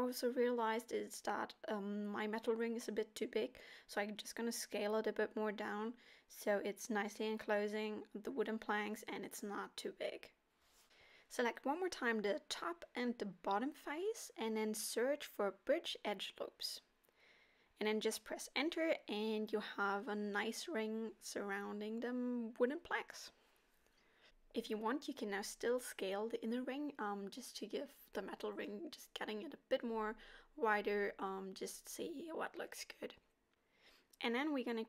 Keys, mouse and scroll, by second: 0.1 KP_7, 1.1 s, 7.3 middle click, 8.6 z, 9.7 middle click, 11.5 click, 12.2 middle click, 13.7 shift+click, 14.7 space, 19.0 middle click, 20.4-20.8 scroll up 3, 20.8 middle click, 23.7 middle click, 24.8 middle click, 26.0 right click, 26.2 s, 27.8 middle click, 31.1 scroll down 2, 31.5 middle click, 33.5 shift+a.